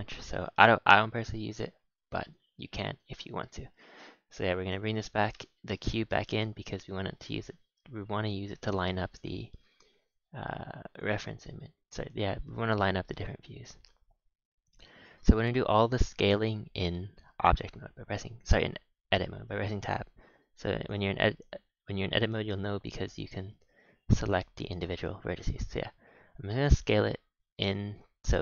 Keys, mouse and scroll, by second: 2.2 click, 3.3 alt+h, 3.7 a, 3.8 a, 4.0-4.5 scroll down 1, 4.5 click, 5.3 KP_1, 6.0 Tab, 6.4 z, 6.9-7.2 scroll up 4, 7.2 s, 11.3 scroll up 3, 12.4 s, 15.4 scroll down 4, 15.6 scroll up 1, 15.9 scroll down 4, 16.1 Tab, 16.6 Tab, 17.2-20.4 scroll up 6, 20.4 click, 21.3 a, 21.5 a, 21.9 click, 23.4 a, 23.5 a, 23.7 click, 24.5 click, 25.2 a, 25.8 a, 26.4 g.